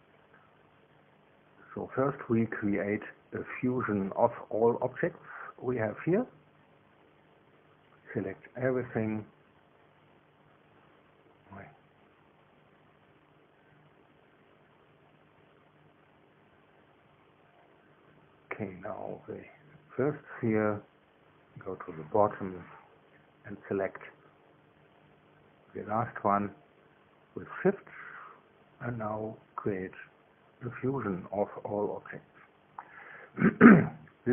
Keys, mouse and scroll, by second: 1.6 click, 8.0-10.7 scroll down 3, 11.8 click, 14.1 click, 15.0 click, 16.2 click, 17.0 scroll down 1, 17.3-24.7 scroll up 1, 24.7 click, 25.5-26.1 scroll down 1, 26.1-26.8 scroll down 1, 28.0 shift+click, 30.6 click.